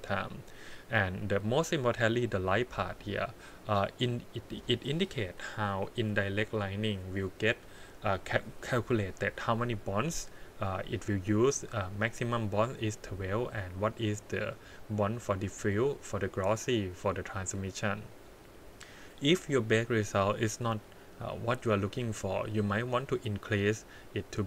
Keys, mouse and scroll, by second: 0.0-1.8 scroll down 3, 1.8 click, 2.3-3.1 scroll down 3, 23.0-24.4 drag.